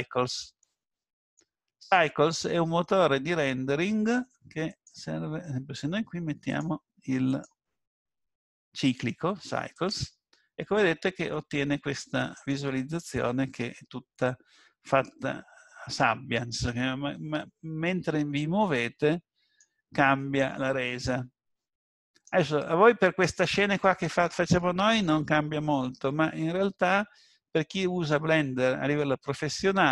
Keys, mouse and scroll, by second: 0.9 middle click, 4.7 click, 6.5 click, 11.5 middle click, 12.9 scroll up 2, 13.9 scroll down 1, 14.5-14.9 scroll down 1, 15.0 shift+middle click, 18.6 middle click, 27.5-28.2 scroll up 3.